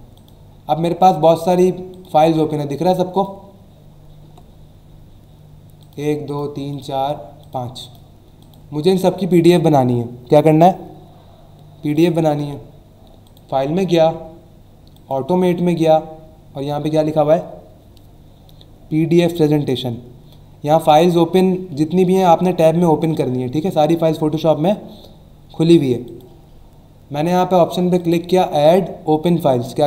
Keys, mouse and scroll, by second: 0.1 click, 1.2 click, 1.9 click, 2.3 alt+scroll down 1, 3.1 click, 3.5 alt+scroll down 1, 5.8 click, 6.3 click, 6.7 click, 7.4 click, 7.8 click, 8.4 click, 11.9 click, 13.2 click, 14.9 click, 26.0 click, 28.0 click.